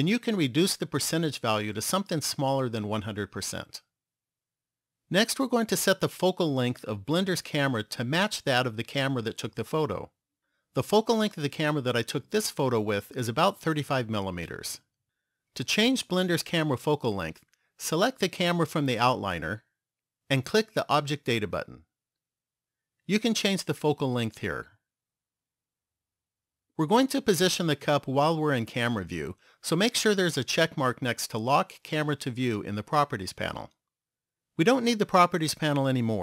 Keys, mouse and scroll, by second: 18.3 click, 21.0 click, 23.9 click.